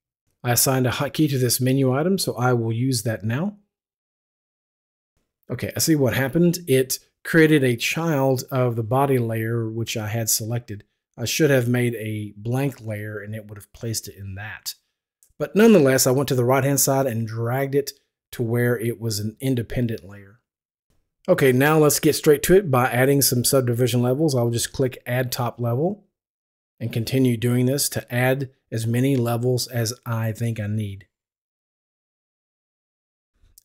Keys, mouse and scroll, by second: 4.7 F11, 4.8 ctrl+r, 9.4 r, 10.2 click, 25.4 click, 28.2 click, 30.0 click, 32.2 click.